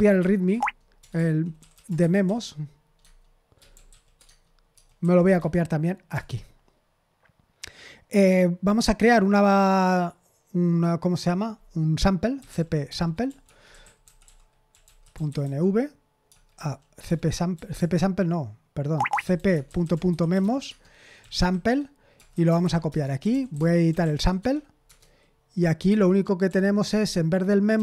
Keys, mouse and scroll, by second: 0.0-5.3 typing, 0.5 Tab, 3.0 Tab, 6.1 Return, 12.1-24.8 typing, 25.8 Escape, 26.4-27.8 typing.